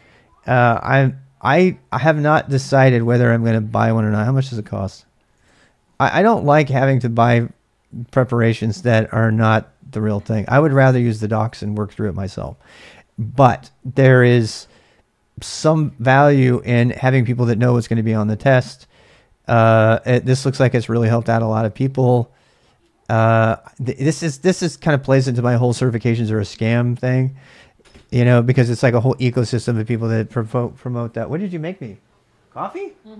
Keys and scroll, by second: 4.3 ctrl+a, 4.4 ctrl+a, 5.4 alt+Tab.